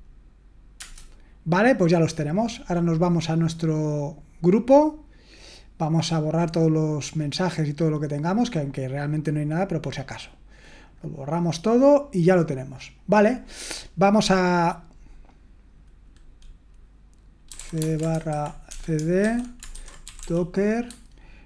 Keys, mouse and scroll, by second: 6.4 click, 9.4-14.1 drag, 18.1-20.7 typing, 20.9 Tab.